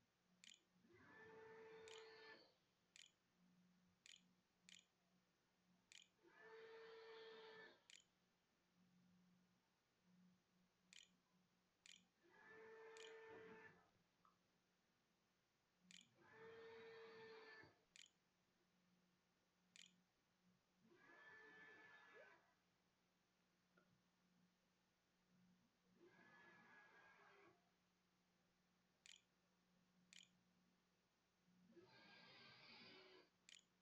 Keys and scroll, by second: 0.0-13.5 typing, 14.8-20.2 typing, 18.7 Delete, 27.5-28.4 typing, 28.6 End, 29.9 Return, 30.7 ', 31.0 ;, 32.1 k, 33.1-33.8 typing.